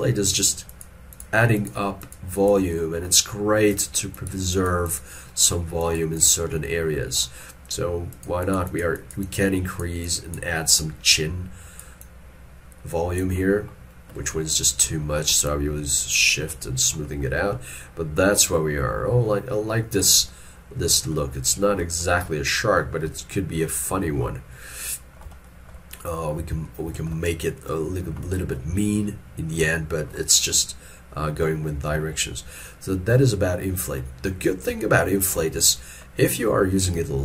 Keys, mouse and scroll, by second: 0.7 double click, 10.8 middle click, 15.5 shift+click, 16.7 middle click, 21.2 middle click, 23.9 middle click, 26.7 shift+middle click, 27.3 middle click, 35.7 middle click, 37.0 f.